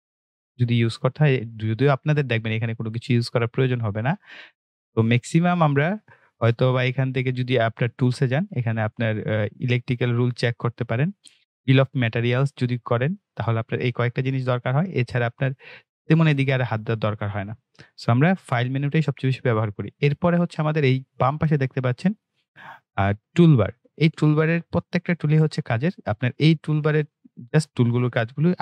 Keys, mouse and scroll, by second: 20.2 click.